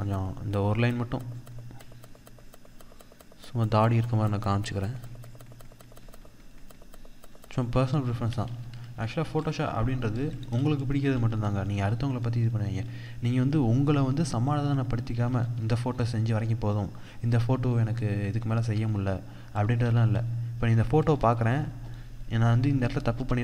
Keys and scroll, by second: 8.6 ctrl+-, 8.9 ctrl+0, 10.4 ctrl+=, 12.3 ctrl+0, 14.6 ctrl+=, 19.0 ctrl+0, 20.8 ctrl+=.